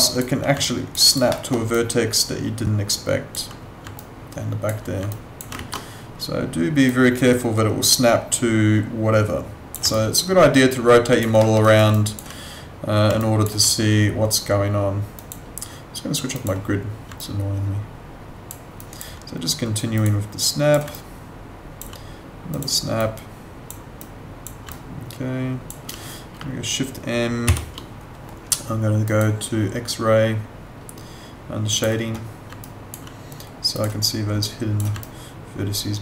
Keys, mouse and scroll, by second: 0.6 alt+click, 1.0 alt+right click, 1.3 alt+middle click, 1.7 alt+click, 4.0 alt+click, 5.1 alt+click, 6.9 click, 9.9 alt+click, 11.4 alt+middle click, 11.6 alt+right click, 11.9 alt+click, 13.2 alt+click, 17.2 alt+click, 19.9 click, 20.9 alt+click, 25.1 alt+click, 27.5 shift+m, 29.1 click, 31.7 click, 32.6 alt+click, 35.0 alt+click.